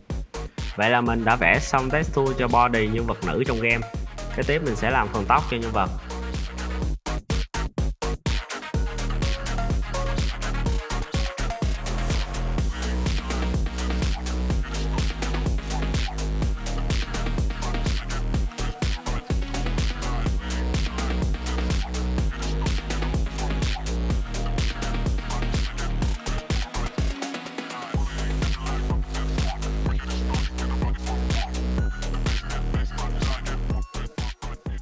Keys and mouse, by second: 0.3 middle drag, 0.6-1.7 middle drag, 2.4 shift+drag, 2.9 ctrl+s, 3.9 click, 4.1 Tab, 4.3-6.2 typing, 5.1 drag, 6.5 Tab, 7.0-8.1 drag, 8.7 z, 9.0 shift+click, 9.2 z, 10.1 click, 10.2 z, 10.5 click, 11.6 click, 11.7-13.1 drag, 13.7 click, 15.0 middle drag, 15.5 Tab, 15.7 a, 15.9 s, 17.0 ctrl+r, 17.5-20.0 typing, 20.6 middle click, 21.3-24.2 typing, 21.6 Tab, 22.6 Tab, 22.9 click, 24.9 ctrl+r, 25.6 click, 25.9 click, 26.5 click, 26.9 click, 28.5 click, 28.8 click, 29.5 click, 29.7 click, 30.2 `, 30.4 Tab, 30.7 z, 30.9-31.2 middle drag, 31.3 click, 31.7-32.5 middle drag, 32.6 `, 33.1 click, 33.5 click.